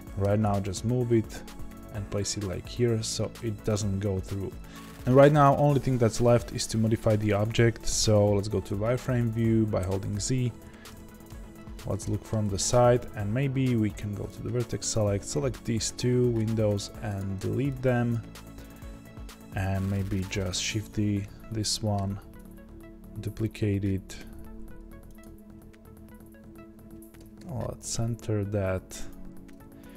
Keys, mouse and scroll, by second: 0.2 g, 9.8 z, 10.8 KP_1, 12.4 Tab, 14.8 click, 17.1 x, 18.1 click, 20.6 shift+d.